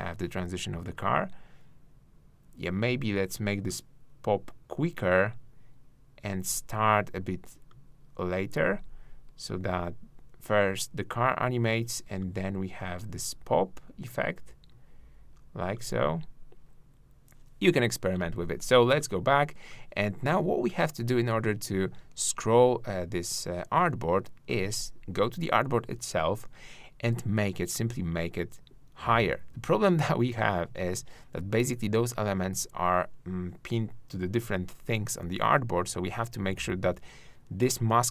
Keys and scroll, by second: 30.7 super+z.